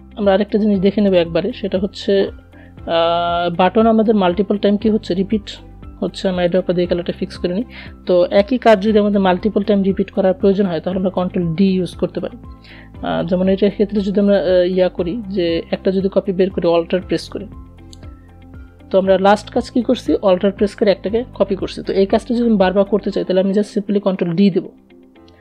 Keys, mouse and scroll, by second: 4.2 i, 4.7 click, 5.5 v, 6.0 click, 12.6 click, 15.0-22.7 alt+drag, 22.7 ctrl+d, 25.1 ctrl+z.